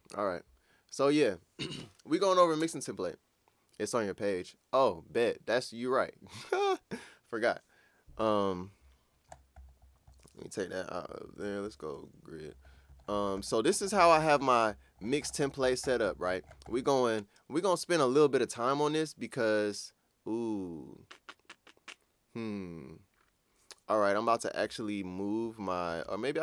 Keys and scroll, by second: 11.1 F2, 11.2 F3, 11.6 F4, 26.0 super+Tab.